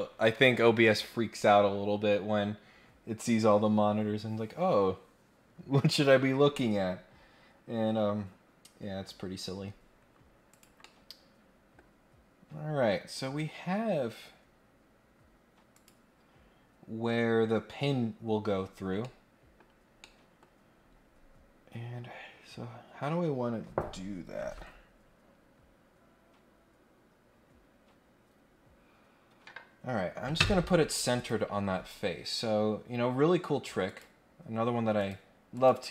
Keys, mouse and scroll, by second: 10.5 click, 10.8 middle click, 12.2 scroll down 1, 12.5 scroll up 1, 15.7 click, 18.7 scroll down 1, 19.0 middle click, 19.5-20.0 scroll down 3, 20.0 middle click, 20.7-21.2 scroll up 2, 31.1 click, 33.8 click, 35.0 click, 35.5 click.